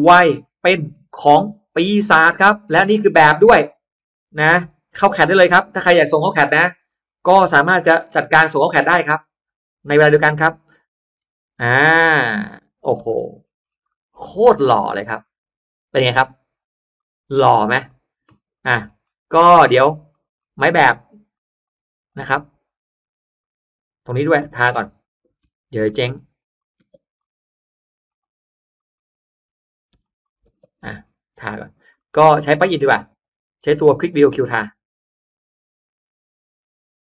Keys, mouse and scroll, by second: 0.1-1.1 scroll up 2, 1.1 middle click, 1.7-2.1 scroll down 1, 2.1-2.9 scroll up 2, 2.3 middle click, 3.0 middle click, 3.5-3.9 scroll up 2, 3.7 middle click, 4.1 scroll down 1, 4.9-5.7 scroll down 2, 4.9 space, 5.2 middle click, 6.0-6.6 drag, 6.9-7.3 scroll down 1, 7.3 middle drag, 7.9 m, 8.3 click, 8.9 click, 9.9 click, 10.3 click, 12.5 shift+click, 12.9 space, 12.9 click, 13.3 middle click, 13.7 scroll up 1, 13.8 middle click, 14.1-14.5 scroll down 1, 14.5-14.9 scroll up 1, 14.9 middle click, 15.1 scroll down 1, 16.9 click, 17.7-19.3 scroll up 3, 19.3 middle click, 19.5-20.1 middle drag, 19.5-19.9 scroll down 1, 19.7 space, 19.9-20.6 scroll up 2, 20.3-20.6 middle drag, 20.3 space, 21.2 click, 21.4 click, 21.9 click, 22.3 click, 22.7 click, 24.3 click, 24.5 b, 25.7 alt+click, 26.3 click, 26.7 space, 27.1 click, 27.5 Escape, 27.9 Escape, 28.0 click, 28.9-29.6 drag, 29.9 click, 29.9 b, 30.3 space, 30.5 middle click, 30.7 Escape, 30.7-31.3 scroll down 2, 30.9 Escape, 31.3 Escape, 31.6-32.4 scroll down 2, 31.9 middle click, 34.2 click.